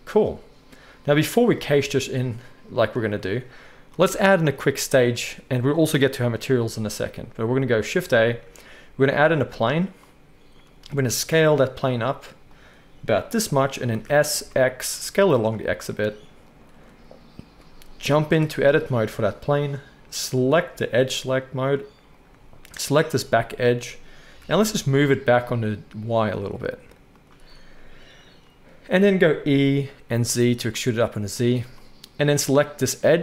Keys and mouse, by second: 1.3 space, 1.8 alt+a, 7.9 shift+a, 11.0 s, 12.6-18.9 middle drag, 13.8 s, 18.3 Tab, 19.0-20.4 middle drag, 20.4-22.2 drag, 23.2 shift+middle drag, 23.4 shift+middle click, 23.6 middle click, 24.2 g, 29.0 e, 32.1 middle click, 32.6-33.2 drag.